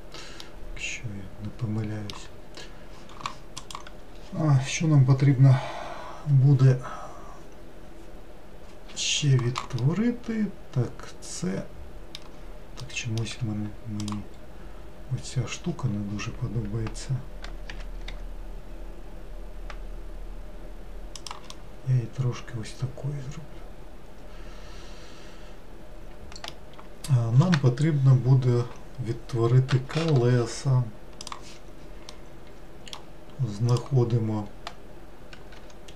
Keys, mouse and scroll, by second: 0.5-2.4 middle drag, 2.4-2.7 scroll down 2, 9.9-13.4 middle drag, 13.4 2, 14.1 click, 17.8 g, 21.7-24.6 middle drag, 32.2-33.8 middle drag, 33.8 click, 35.7 1.